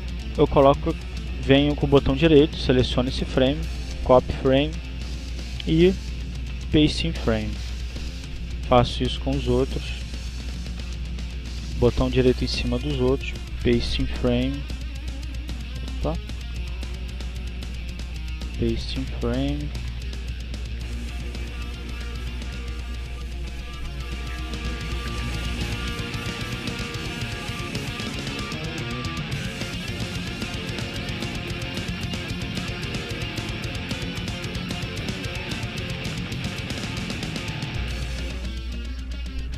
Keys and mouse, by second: 0.7 click, 2.2 right click, 3.2 click, 4.7 click, 5.0 right click, 5.9 click, 6.7 right click, 7.6 click, 8.7 right click, 9.5 click, 10.3 right click, 11.1 click, 14.2 right click, 15.1 click, 16.3 click, 17.2 click, 17.5 right click, 18.3 click, 20.9 right click, 23.0 click, 24.2 right click, 25.1 click, 25.8-26.8 drag, 26.2 right click, 27.1 click, 28.2 click, 28.2 right click, 28.9 click, 30.0 click, 30.0 right click, 30.8-32.5 drag, 31.9 right click, 33.0 click, 34.0 click, 34.1 right click, 35.1 click, 36.0-37.0 drag, 36.4 right click, 37.2 click, 38.1 click.